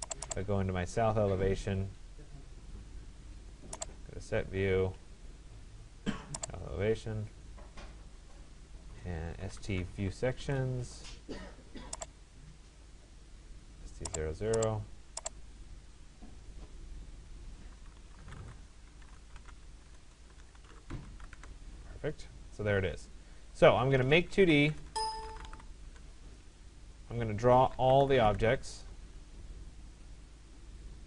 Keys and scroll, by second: 10.0 Return, 13.2 Return, 19.5 BackSpace, 21.4 Return, 24.7 BackSpace, 25.9 Return.